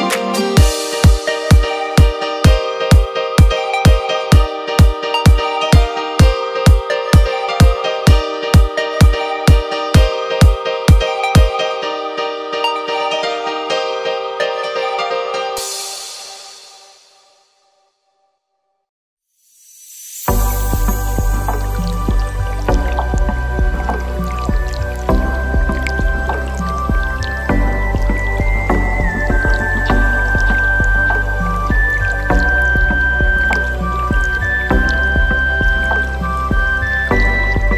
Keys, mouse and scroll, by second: 1.0-2.0 drag, 3.7 click, 4.8-6.9 middle drag, 8.3 click, 9.9 click, 10.6 click, 11.2-14.4 drag, 14.9 click, 22.0 click, 23.5-25.9 drag, 26.8-28.0 drag, 28.8-30.9 middle drag, 31.9-32.8 scroll up 2, 32.8 click, 33.9 click, 35.3-37.7 drag.